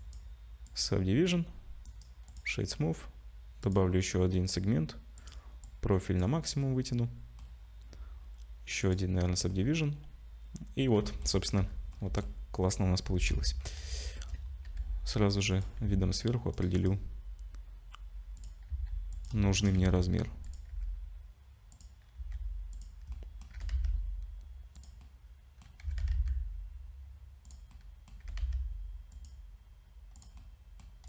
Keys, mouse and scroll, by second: 0.0 Tab, 0.0 middle click, 0.0 click, 0.0 z, 1.9 right click, 3.6 click, 5.2 click, 6.6 click, 6.6 middle click, 8.8 click, 9.5 middle click, 11.6 /, 11.9 middle click, 13.3 KP_7, 14.0 shift+middle click, 14.4-14.9 scroll up 3, 14.7 g, 15.9 s, 16.8 right click, 18.7 s, 19.4 shift+middle click, 19.8 s, 20.7 g, 22.2 s, 23.1 middle click, 23.6 g, 25.0 middle click, 25.8 s, 27.7 middle click, 28.2 g, 30.2 click, 30.4 middle click.